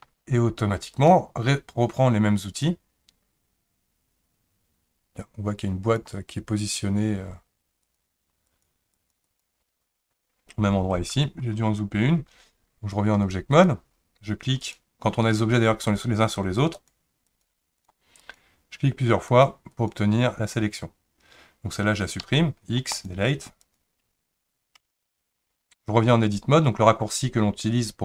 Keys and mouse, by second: 0.9 click, 2.7-6.2 drag, 7.8 click, 8.5 click, 8.9 click, 9.3 click, 13.1-13.7 drag, 14.6 click, 16.7 click, 17.8 click, 18.2 click, 19.7 click, 22.2 x, 23.6 click, 24.8 Tab.